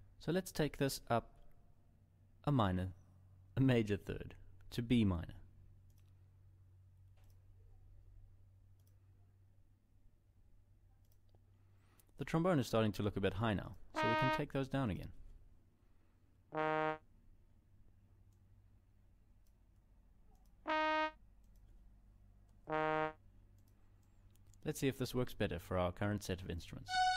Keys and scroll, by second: 16.0 ctrl+Down, 22.2 ctrl+Down.